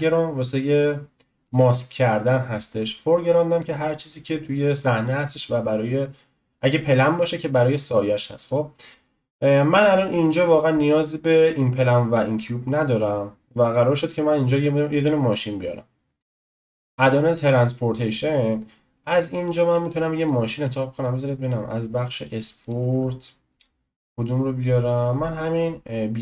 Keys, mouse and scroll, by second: 1.4-6.6 drag, 6.6 click, 11.5 Delete, 12.1 click, 12.4 Delete, 14.5 n, 16.2-16.9 scroll up 10, 19.6-26.2 drag.